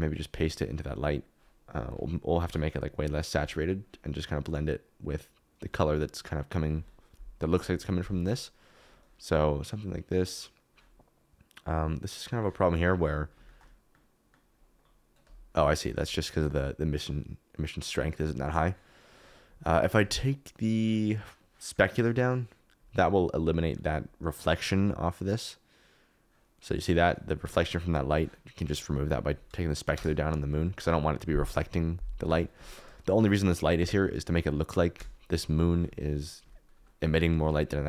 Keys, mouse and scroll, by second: 0.5 click, 2.4 ctrl+v, 8.7-12.4 drag, 14.6 KP_Decimal, 16.5-18.4 drag, 19.1 click, 20.0 click, 20.8-21.9 drag, 29.9 KP_0, 33.6 KP_Decimal.